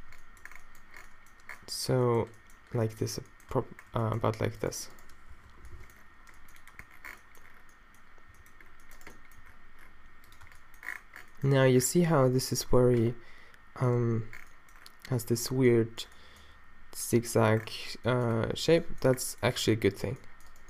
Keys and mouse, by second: 0.0 Tab, 0.0 g, 0.8 middle click, 3.2 middle click, 3.5 Tab, 5.5 -, 5.7 middle click, 6.0 middle click, 8.3 g, 9.4 g, 10.5 Tab, 13.7 middle click, 19.5 Tab, 19.9-20.6 drag.